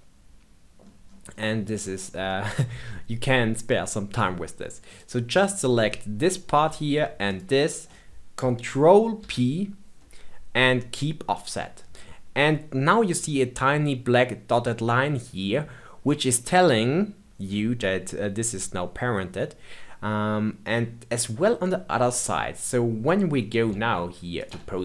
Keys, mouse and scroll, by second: 1.0 scroll up 2, 1.3-2.0 middle drag, 2.0 scroll down 1, 2.2-4.9 shift+middle drag, 4.9 click, 7.2 shift+click, 9.1 ctrl+p, 16.3-19.3 middle drag, 23.7 ctrl+Tab.